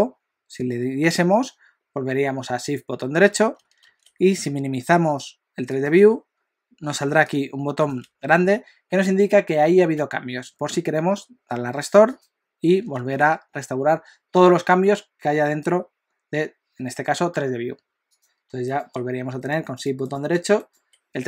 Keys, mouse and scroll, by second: 18.7 shift+right click.